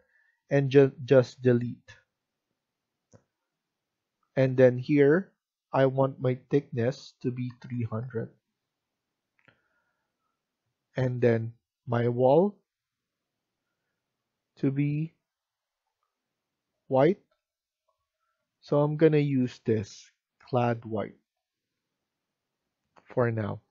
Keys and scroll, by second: 7.1-8.1 typing.